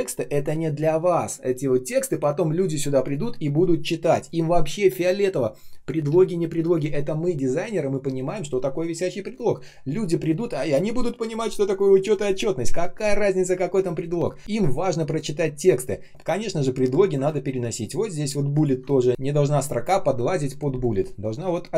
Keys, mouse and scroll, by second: 16.1 space, 17.3 ctrl+scroll up 1, 18.4 ctrl+click.